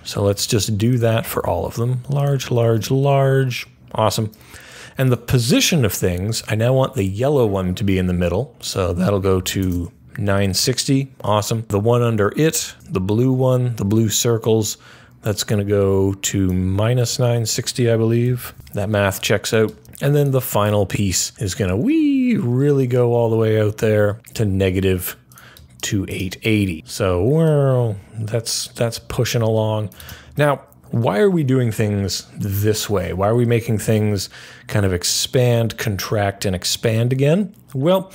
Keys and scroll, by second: 0.1 super+v, 1.0 super+c, 1.2 super+v, 2.3 super+c, 2.5 super+v, 9.0-10.0 typing, 17.9-19.1 typing.